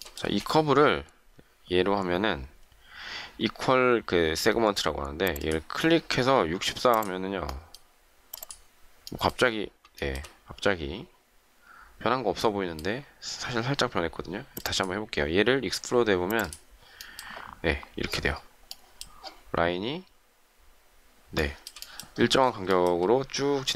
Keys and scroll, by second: 0.2 shift+space.